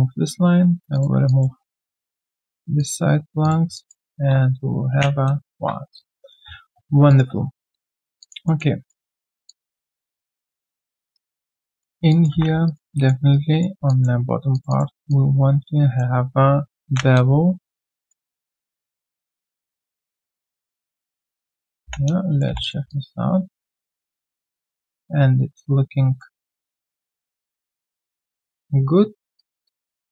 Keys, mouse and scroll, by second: 0.9 shift+click, 1.2 alt+click, 2.1 shift+click, 3.7 alt+click, 4.9 ctrl+Delete, 6.4 right click, 6.4-7.3 scroll down 1, 7.7 alt+click, 8.0 alt+right click, 8.2 alt+click, 8.4 alt+middle click, 8.7 alt+right click, 9.1 alt+middle click, 9.4 alt+click, 10.1 alt+middle click, 10.3 alt+click, 11.1 alt+right click, 11.4 alt+middle click, 12.1 alt+click, 12.3 1, 12.6 alt+right click, 12.9 alt+click, 13.3 alt+right click, 13.8 alt+click, 15.1 alt+click, 16.8 ctrl+b, 21.5 alt+click, 21.8 alt+click, 22.1 alt+right click, 22.4 q, 22.9 alt+click, 23.3 alt+scroll down 1, 23.6 alt+click, 24.6 alt+right click, 24.8 alt+click, 26.3 alt+right click, 26.6 alt+click, 29.0 scroll down 1, 29.6 alt+click.